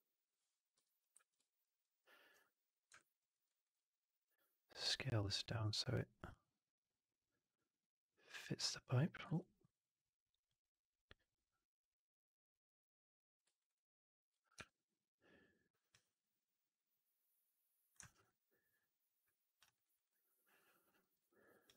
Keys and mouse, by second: 1.2 shift+x, 1.5 middle click, 1.9 click, 2.8 click, 3.2 alt+middle click, 3.3 click, 3.3 alt+right click, 4.2-8.5 drag, 9.5 ctrl+z, 10.5-13.3 drag, 13.5 alt+right click, 13.6 alt+click, 14.8 4, 17.6 click, 18.0 alt+right drag, 18.1-19.5 alt+drag, 19.6 alt+right drag, 19.8 alt+right drag, 20.0-20.8 alt+drag, 20.9 alt+middle drag, 21.1 alt+right click, 21.3 alt+right click, 21.5 alt+click.